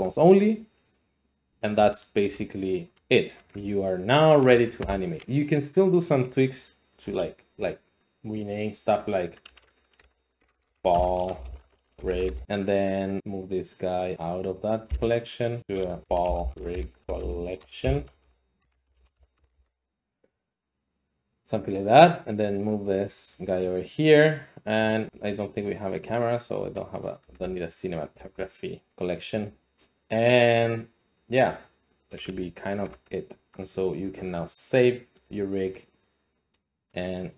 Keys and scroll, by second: 9.5-12.5 typing, 14.9 m, 15.9-19.2 typing, 19.4 Return, 19.5 Return, 27.2 x, 28.1 x.